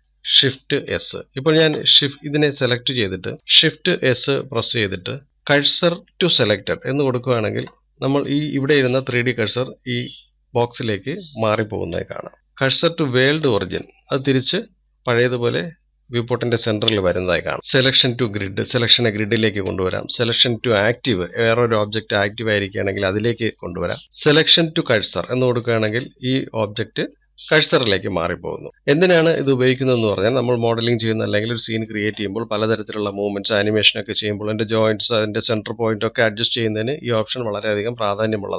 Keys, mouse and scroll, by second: 0.0-1.1 middle drag, 1.1 click, 3.4 shift+s, 3.7 click, 14.6 shift+s, 28.7-29.2 scroll down 3, 29.2-30.5 middle drag, 30.5 click, 31.5 click, 33.4-38.5 middle drag.